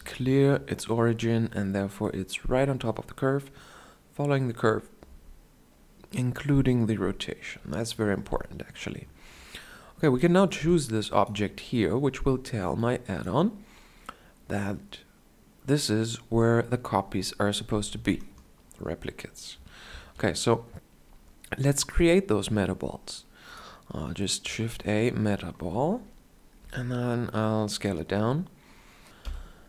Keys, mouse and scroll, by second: 3.4-19.6 drag, 19.6 shift+a, 26.3 s.